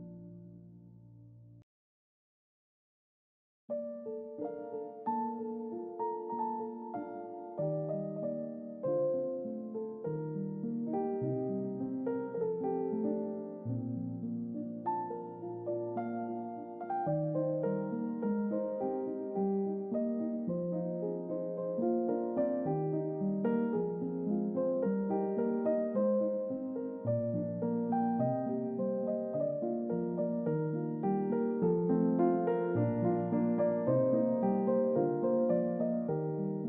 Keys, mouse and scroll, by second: 2.3 click, 6.7 click, 10.1 g, 14.7 click, 16.4 click, 21.5 s, 24.9 click, 26.3 click, 31.8 g, 33.7 click, 34.9 click, 36.0 click.